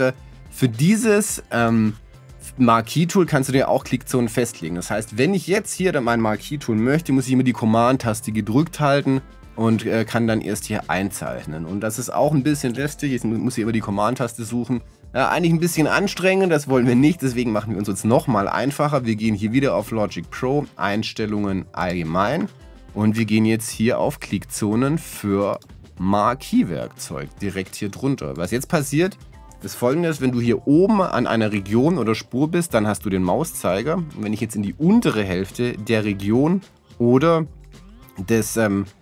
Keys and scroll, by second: 0.2 super+z.